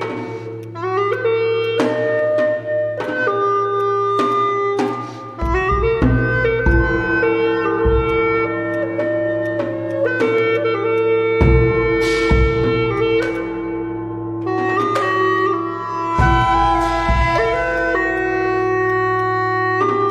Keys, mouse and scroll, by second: 1.8 scroll up 1, 2.7 alt+middle click, 3.0 right click, 4.5-4.8 scroll down 1, 4.8 right click, 5.3 scroll down 1, 6.1 scroll down 1, 6.3 alt+middle click, 12.8 ctrl+z, 15.7 ctrl+z.